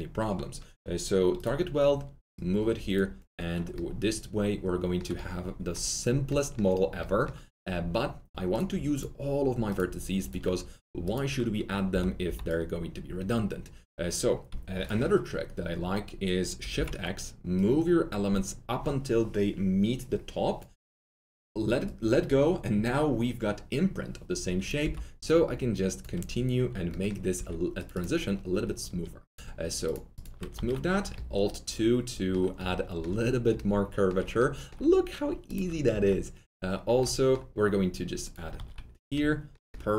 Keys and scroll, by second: 3.6 1, 11.8 ctrl+s, 16.7 shift+x, 24.7 r, 27.3 2, 30.5 ctrl+alt+2, 35.9 ctrl+alt+2, 38.5 alt+2.